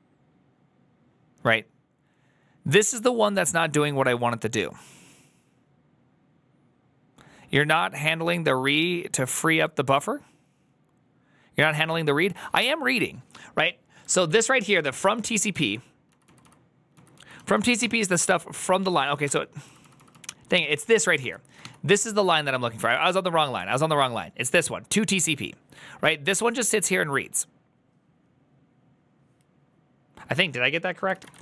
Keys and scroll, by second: 14.1-18.2 typing, 15.4 ctrl+u, 18.7 ctrl+c, 19.1 ctrl+d, 19.3-21.5 typing, 21.1 ctrl+c.